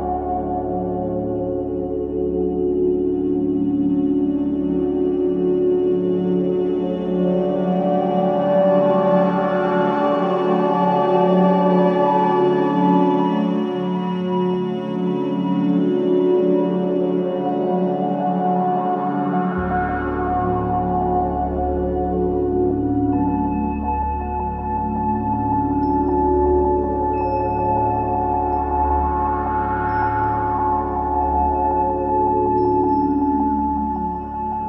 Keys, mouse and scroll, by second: 0.2 alt+right click, 0.7-3.8 alt+drag, 3.8 alt+right click, 4.3 alt+click, 4.8 alt+middle click, 5.1 alt+right click, 5.4 alt+click, 5.8 alt+middle click, 6.2 alt+right click, 6.6 alt+click, 6.9 alt+middle click, 7.4 click, 7.8 ctrl+z, 9.0 click, 9.4 alt+click, 9.7 alt+right click, 13.5 click, 14.9-16.3 scroll down 1, 16.3 click, 16.8-18.2 alt+drag, 18.7 alt+right click, 19.0-20.8 alt+drag, 20.8 alt+right click, 21.4 alt+click, 21.7 alt+right click, 22.3 ctrl+z, 26.3 click, 27.9-29.4 alt+drag, 29.4 ctrl+z, 30.4 click, 32.2-34.6 alt+drag.